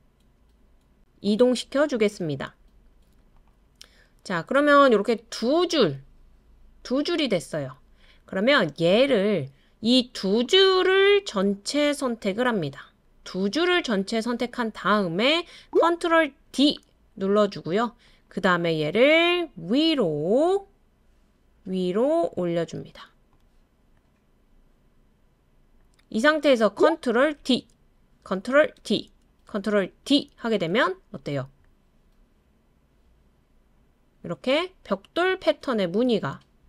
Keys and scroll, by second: 16.4 super+d, 27.4 super+d, 28.8 super+d, 30.0 super+d.